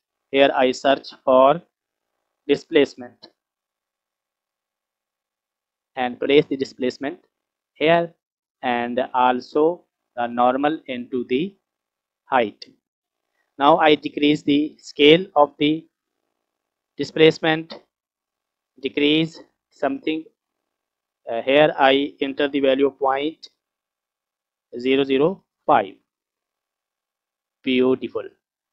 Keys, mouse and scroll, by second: 1.3 shift+a, 10.5 click, 11.3-12.7 drag, 17.4-20.7 drag, 22.5-26.0 drag, 24.9 KP_0, 27.4 click, 28.3 scroll up 1.